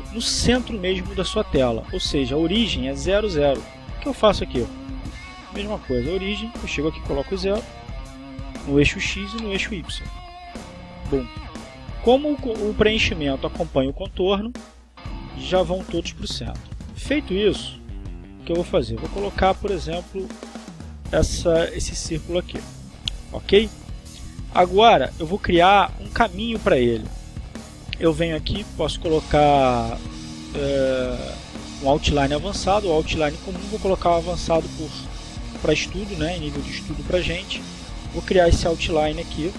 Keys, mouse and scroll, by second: 4.9 click, 6.5 click, 8.0 0, 8.3 Return, 9.7 0, 10.1 Return, 11.8 click, 16.3-17.4 drag, 19.1-20.7 drag, 27.7 click, 28.8 click, 29.7 click, 38.8 click.